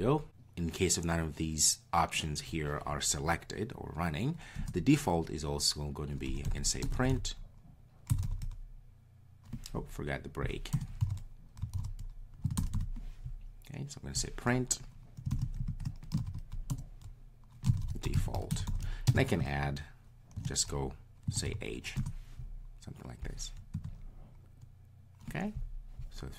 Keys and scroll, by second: 22.0 Return.